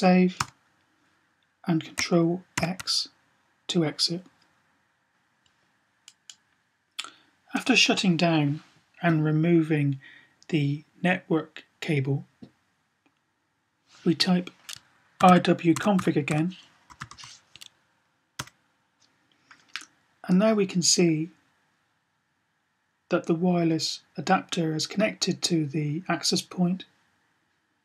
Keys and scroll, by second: 2.4 typing, 14.9-17.0 typing.